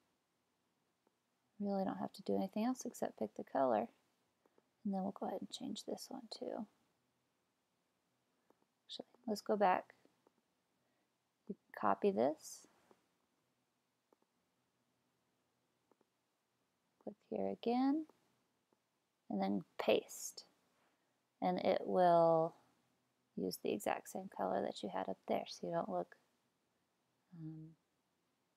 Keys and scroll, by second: 13.2 super+c, 19.7 super+v.